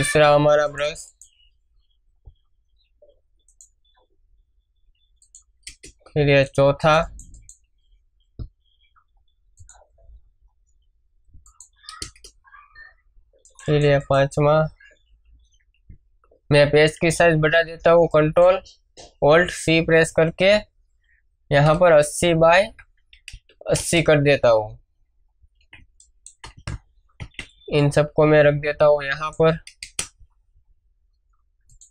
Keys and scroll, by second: 5.6 Return, 12.0 Return, 16.4 ctrl+alt+c, 21.5 8, 22.4 Tab, 23.7 Return, 25.6 space, 26.3 space, 29.8 Return.